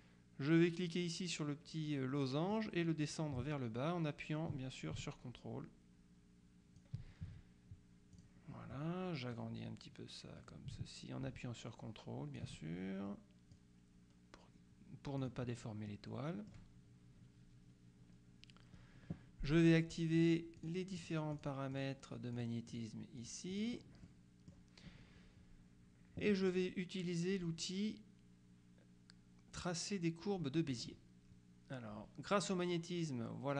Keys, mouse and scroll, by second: 2.6-7.4 drag, 8.2 click, 9.4-13.0 drag, 13.6-15.8 drag, 16.0-17.1 middle drag, 20.2-22.4 drag, 23.6 click, 30.8 click.